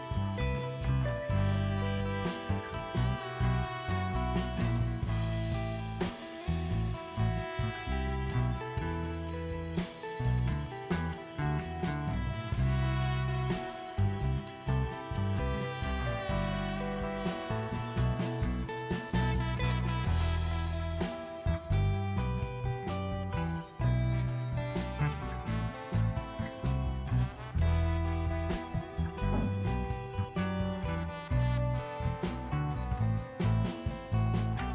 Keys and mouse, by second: 0.9 click, 1.6 click, 1.7-4.7 typing, 3.7 click, 5.9 g, 6.5 g, 7.0 g, 7.3 click, 7.5 g, 9.7 click, 10.0 g, 11.6 g, 13.1 click, 13.6 e, 14.1 g, 14.2 click, 14.7 g, 15.1 click, 15.3 g, 15.8 click, 16.9 g, 18.1 click, 18.7 g, 19.3 g, 19.8 click, 19.9 g, 22.0-23.1 drag, 25.6 shift+click, 26.1 shift+click, 26.8 shift+click, 27.4-28.1 shift+drag, 28.9-29.6 shift+drag, 29.9 ctrl+z, 30.1 shift+click, 30.3 ctrl+s, 31.3 g, 31.4 x, 31.7 click.